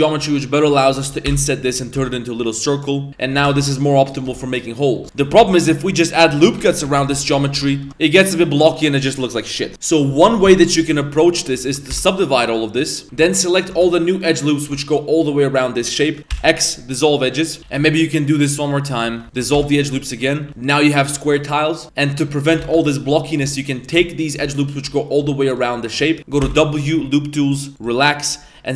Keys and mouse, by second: 1.2 i, 1.9 w, 3.1 e, 3.4 ctrl+z, 3.6 e, 4.2 Tab, 4.5-4.9 middle drag, 5.0 Tab, 5.0 middle click, 6.3-6.8 ctrl+z, 7.0 ctrl+z, 7.4 middle click, 7.8 Tab, 8.1 middle drag, 9.7 ctrl+z, 9.7 Tab, 10.9 middle click, 11.6 a, 11.9 w, 13.0 2, 13.0 a, 13.5 alt+right click, 14.1 right click, 14.5 right click, 16.3 x, 17.6 a, 17.7 w, 18.7 middle click, 19.0 2, 19.2 alt+shift+right click, 20.0 middle click, 20.4 3, 20.8 right click, 21.0 Tab, 21.2 middle click, 21.5-28.7 middle drag.